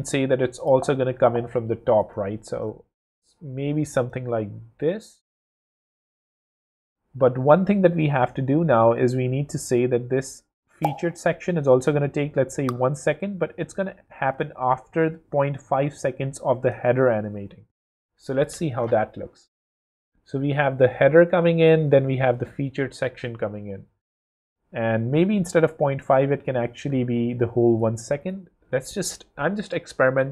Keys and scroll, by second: 0.6 shift+space, 3.6 w, 17.9 shift+w, 28.3 shift+w, 29.0 w.